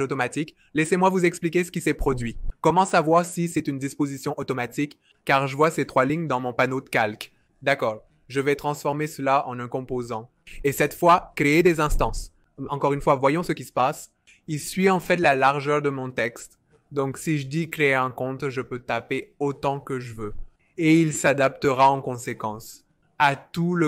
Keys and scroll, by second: 14.1-15.0 typing, 16.3-20.5 typing.